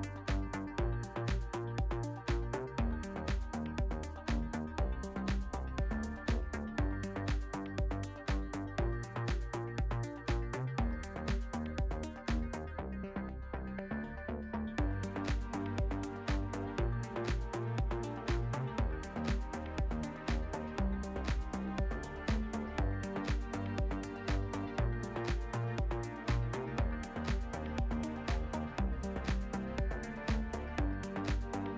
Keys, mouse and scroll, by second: 1.1 click, 1.3 s, 3.7 click, 4.1 e, 4.7 click, 4.8 s, 6.4 click, 7.2 s, 7.8 middle click, 8.3 e, 10.0 click, 10.1 s, 12.2 click, 12.9 click, 13.8 Tab, 14.3 Tab, 14.6 Tab, 16.2-16.9 drag, 18.2-21.9 drag, 22.9 alt+shift+middle click, 25.8 click, 26.3 click, 27.0-27.8 alt+middle drag, 28.5 alt+shift+middle click, 29.0 Tab, 29.5 alt+shift+middle click, 30.5 alt+z, 30.7 a, 30.9 click, 31.3 s.